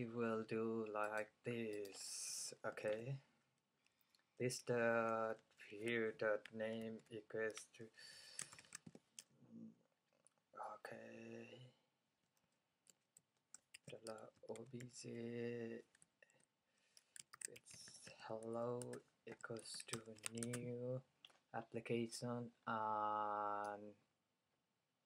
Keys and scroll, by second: 4.5 fn+Down, 5.4 Up, 6.9 super+v, 8.2-11.2 typing, 13.2 Right, 13.8-15.7 typing, 17.1-21.3 typing.